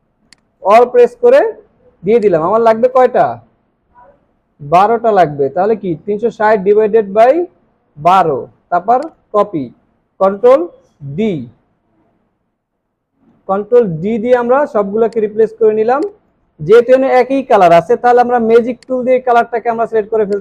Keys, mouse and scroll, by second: 0.3 alt+click, 4.3 typing, 6.8 typing, 15.5 alt+scroll down 1, 15.9 space.